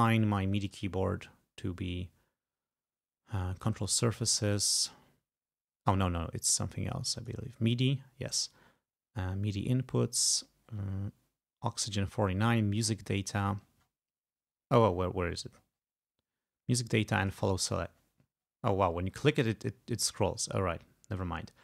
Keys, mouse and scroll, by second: 0.7 click, 3.6 click, 7.2 click, 10.4 scroll up 2, 10.7-11.2 scroll down 2, 12.8 click, 13.6-14.1 scroll down 2, 14.8 scroll down 2, 15.0-15.6 scroll up 4, 15.6-16.0 scroll down 2, 16.0-17.3 scroll up 2, 17.3 click, 18.0-18.7 scroll down 2, 18.7 scroll up 2, 18.9-19.4 scroll down 2, 19.4-21.2 scroll up 2, 21.2 click.